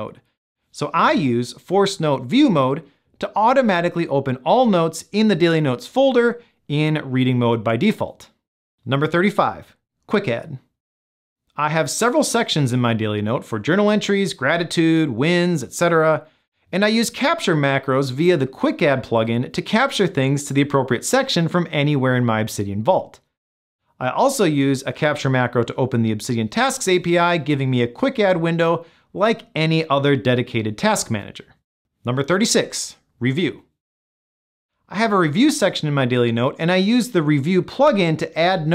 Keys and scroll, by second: 16.4 super+p, 17.4 shift+super+p, 18.5 Return, 21.9 Return.